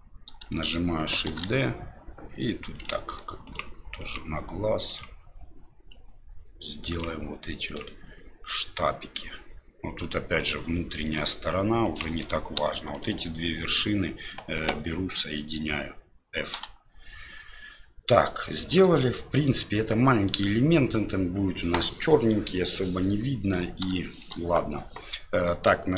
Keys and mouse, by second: 0.5 shift+middle click, 1.3 shift+d, 4.0 click, 6.8 ctrl+click, 11.0 ctrl+click, 12.9 shift+right click, 17.2 f, 24.0 shift+middle click.